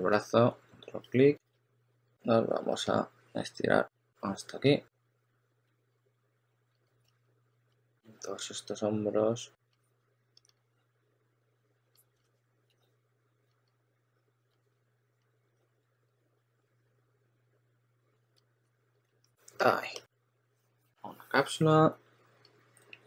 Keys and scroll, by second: 0.0 w, 1.1-2.3 typing, 5.6 s, 6.6 s, 7.0 2, 9.4-10.9 typing, 12.6-13.4 typing, 14.4 typing, 15.7 w, 16.2 2, 18.3-19.4 typing.